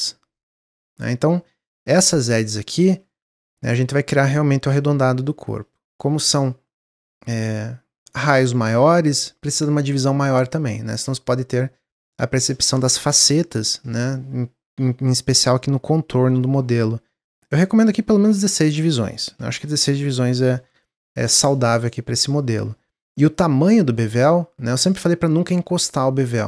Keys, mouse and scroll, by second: 2.4 middle click, 3.0-3.3 scroll up 1, 4.1-7.1 drag, 10.6-13.7 drag, 17.4-20.4 drag, 21.7-22.9 middle drag, 23.3-26.3 shift+drag.